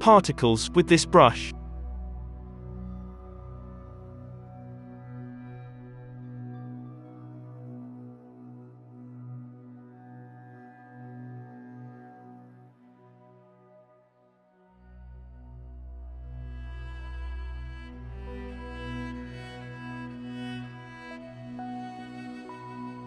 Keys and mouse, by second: 0.4 ctrl+z, 5.5 middle click, 5.5 f, 5.9 ctrl+z, 5.9-13.8 drag, 13.8 f, 15.3-17.4 typing, 15.4-15.9 ctrl+z, 16.0 ctrl+z, 18.4 f, 18.9-19.9 ctrl+z, 19.9-21.1 drag, 19.9 f, 20.4 f.